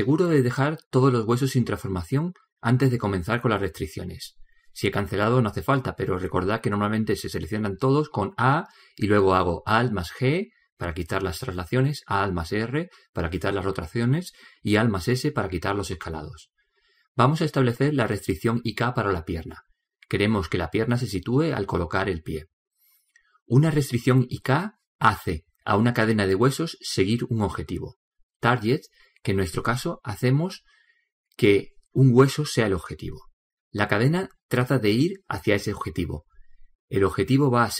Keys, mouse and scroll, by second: 0.1-2.5 middle drag, 8.7 a, 9.1 a, 10.7 alt+g, 12.9 alt+r, 15.2 alt+s, 26.8-31.5 middle drag.